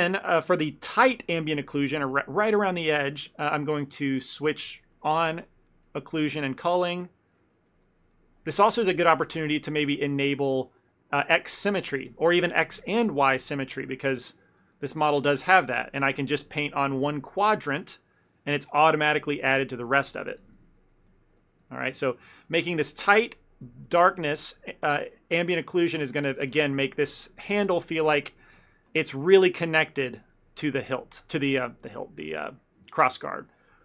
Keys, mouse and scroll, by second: 0.7 ctrl+middle click, 1.1 middle click, 3.5 click, 5.9 ctrl+middle click, 6.3 f, 6.8 ctrl+middle click, 7.4 click, 7.6 click, 8.5 click, 8.7 ctrl+z, 8.8 ctrl+z, 9.5 ctrl+z, 9.5 ctrl+middle click, 12.2 click, 12.7 click, 13.2 middle click, 13.5 middle click, 13.8 ctrl+middle click, 13.9 ctrl+middle click, 14.2 click, 14.3-15.7 click, 15.9 click, 16.3 click, 16.6 click, 16.7 middle click, 17.2 click, 17.3 click, 17.9 click, 18.1 middle click, 18.3 middle click, 18.5 ctrl+middle click, 18.8 middle click, 19.4 middle click, 19.7 ctrl+middle click, 19.9 middle click, 20.4 f, 20.6 ctrl+middle click, 21.0 click, 21.2 click, 21.3 click, 21.5 click, 22.0 click, 22.0 middle click, 22.2 shift+middle click, 22.3 shift+middle click, 22.3 ctrl+middle click, 22.6 f, 22.9 click, 23.1 click, 23.6 click, 24.5 click, 24.5 middle click, 25.2 click, 25.2 click, 25.8 middle click, 26.1 click, 26.3 click, 27.0 middle click, 27.3 click, 27.5 click, 28.7 ctrl+middle click, 28.9 middle click, 29.0 middle click, 29.3 middle click, 29.5 middle click, 29.8 middle click, 30.1 middle click, 30.7 ctrl+middle click, 31.0 middle click, 31.4 middle click, 32.0 ctrl+middle click, 32.4 middle click, 33.0 ctrl+middle click, 33.2 ctrl+middle click.